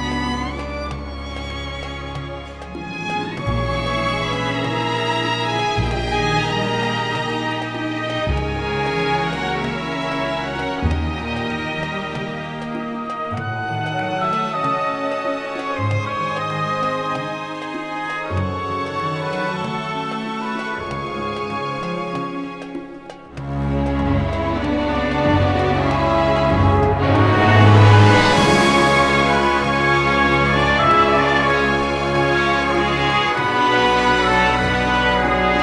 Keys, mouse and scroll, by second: 3.1 right click, 4.1-13.1 drag, 13.1 ctrl+scroll up 1, 13.7 space, 13.9 click, 14.3 space, 15.1 space, 15.4 click, 15.6 space, 16.8 click, 19.3 space, 21.1-25.7 drag, 26.1 click, 31.4 ctrl+scroll up 1, 32.1 space, 32.5 click, 32.6 space, 33.3 ctrl+scroll up 1.